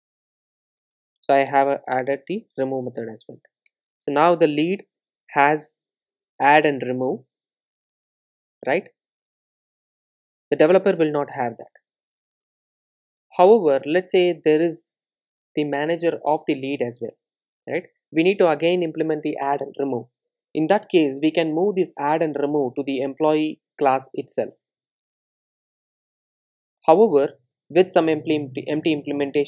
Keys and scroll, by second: 0.8 Return, 5.9 super+s, 23.9 super+b, 26.6 super+d, 27.8 super+d, 28.4 super+z.